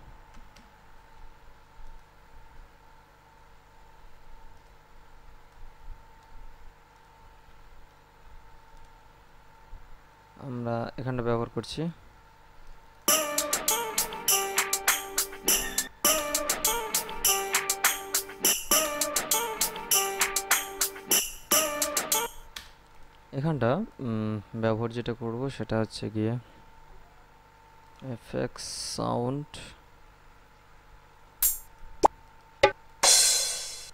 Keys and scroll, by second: 0.0-0.9 typing, 13.2 space, 16.1 space, 18.8 space, 21.4 space.